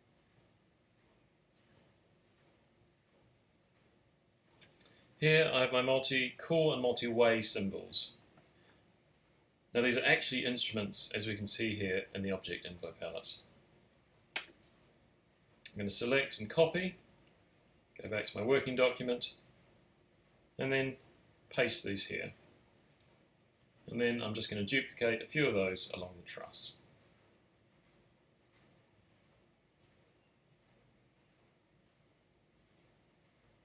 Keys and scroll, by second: 6.0 super+r, 15.3 super+c, 21.5 super+v, 33.1 super+z.